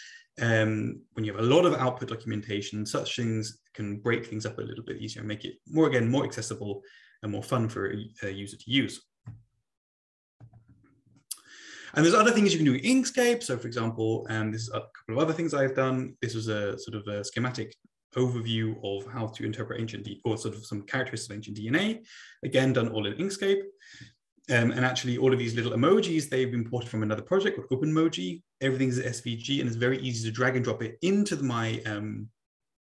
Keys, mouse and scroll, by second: 10.4 Right.